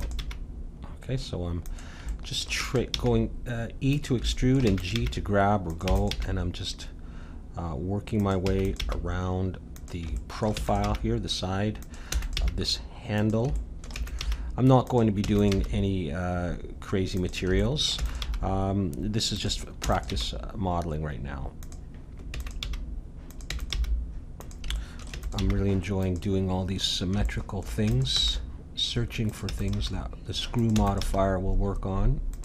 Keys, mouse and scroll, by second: 0.2 g, 2.2-3.7 middle drag, 2.6 e, 2.9 g, 4.6 e, 5.0 g, 6.0-7.7 drag, 6.1 g, 8.5 e, 8.8 g, 10.1-12.0 middle drag, 10.5 e, 10.8 g, 12.1 e, 12.4 g, 13.9 e, 14.2 g, 15.2 e, 15.5 g, 17.6-19.8 middle drag, 18.0 e, 18.2 g, 19.8 e, 20.1 g, 22.3 e, 22.6 g, 23.5 e, 23.7 g, 24.7-26.6 middle drag, 25.1 e, 25.4 g, 26.9 middle click, 27.8 e, 28.1 g, 29.4 e, 29.7 g, 30.7 e, 31.0 g.